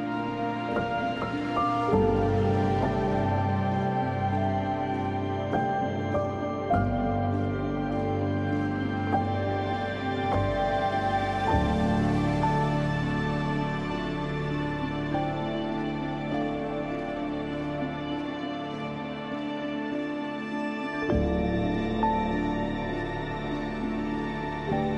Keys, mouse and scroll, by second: 3.2 z, 3.3-5.0 drag, 5.0 space, 6.5-7.8 typing, 7.2 click, 7.7 click, 8.3-10.1 drag, 10.1 space, 10.2 click, 10.6 space, 11.2-11.8 scroll down 1, 11.8 scroll up 1, 14.1-17.4 drag, 19.0 scroll up 1, 20.4 scroll down 1, 22.7-24.4 scroll up 1, 24.4-24.9 scroll down 1.